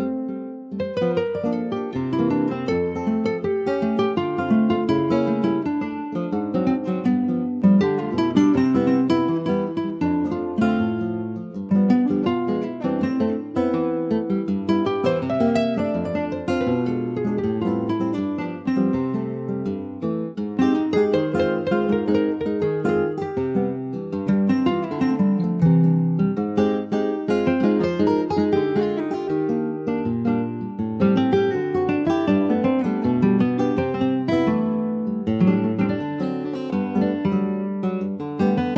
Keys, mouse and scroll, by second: 0.5 /, 1.4 middle click, 1.8 Tab, 2.9 middle click, 3.4 click, 3.7 middle click, 4.2 Tab, 4.9-6.0 middle drag, 6.0 /, 6.4 scroll down 1, 6.6 middle click, 7.0 Tab, 7.7 click, 9.0 3, 9.2 click, 9.7 ctrl+s, 10.0-11.2 drag, 11.2 ctrl+s, 11.6 /, 12.1 middle click, 12.8 scroll up 1, 13.0-14.2 middle drag, 14.2 ctrl+s, 14.3-15.6 shift+middle drag, 15.6 click, 17.1 middle click, 17.7 click, 18.2 middle click, 18.8 click, 20.2-21.5 middle drag, 21.5 e, 24.4 middle click, 25.3 Tab, 25.6 middle click, 26.1 ctrl+s, 26.2 click, 26.6 Tab, 27.4 Tab, 27.7 click, 28.4 click, 28.9 ctrl+a, 30.2 click, 31.1-33.4 right drag, 33.4-34.9 drag, 35.3 ctrl+s, 35.4 click, 35.7 Tab, 36.0 middle click, 36.7 click, 37.8 middle click, 38.2 ctrl+s, 38.5-38.7 drag.